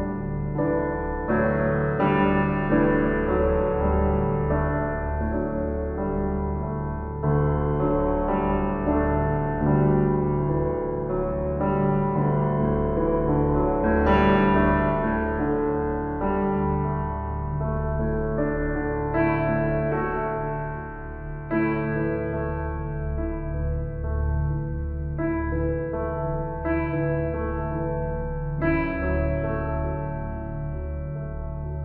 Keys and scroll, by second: 5.7 ctrl+j, 8.6 ctrl+t, 28.5 ctrl+t.